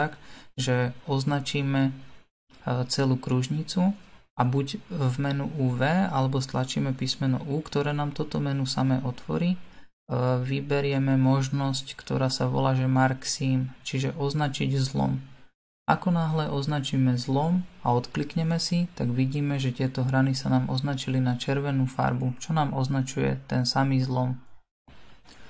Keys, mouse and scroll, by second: 2.0 Tab, 2.8-7.5 middle drag, 7.5 alt+click, 14.8 click, 17.8-18.8 middle drag, 18.8-20.8 scroll up 4, 20.8 alt+click, 23.9 u.